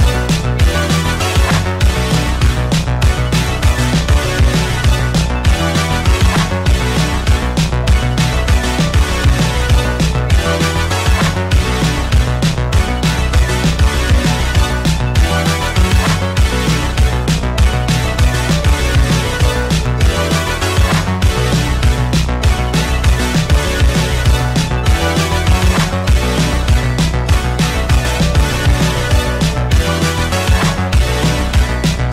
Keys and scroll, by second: 0.0 space, 0.5 space, 1.6 -, 7.3 ctrl+z.